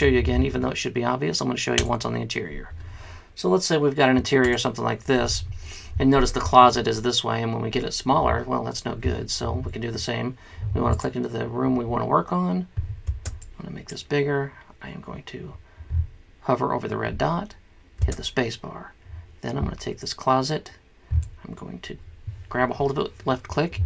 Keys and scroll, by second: 13.2 space, 18.2 space.